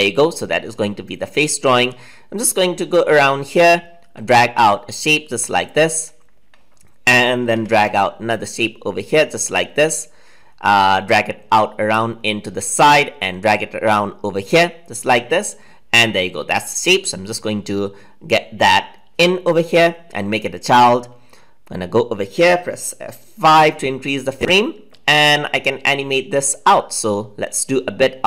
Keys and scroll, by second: 7.5 ctrl+c, 10.3 ctrl+v, 23.5 F5.